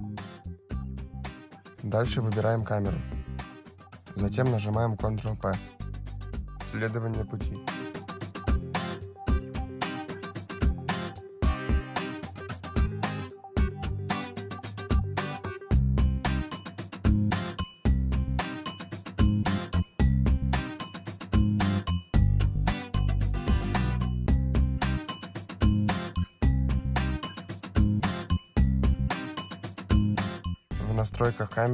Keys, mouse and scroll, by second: 0.2 click, 1.4 click, 1.6 click, 3.3 shift+click, 4.3 ctrl+p, 8.1 click, 10.0 click, 11.1 click, 19.4 middle click, 23.4 click, 24.6 click, 25.9 click, 28.5 click, 30.3 click.